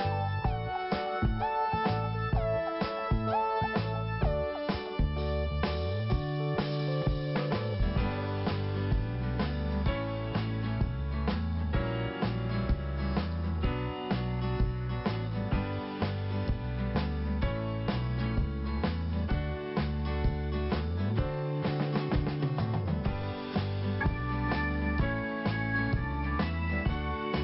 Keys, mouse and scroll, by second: 1.3 click, 2.0 click, 2.8 click, 5.2 click, 8.4 click, 9.6 click, 10.1 click, 12.2 click, 13.8 click, 13.9 click, 15.1 click, 15.5 click, 19.3 click, 20.5 click, 21.2 click, 24.1-25.2 scroll down 1, 26.0 click.